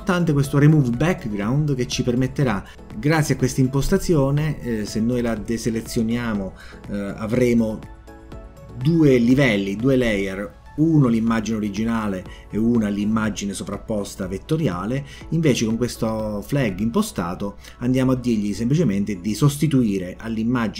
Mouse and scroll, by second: 0.7 click, 1.9 click, 4.6 click, 12.1 click.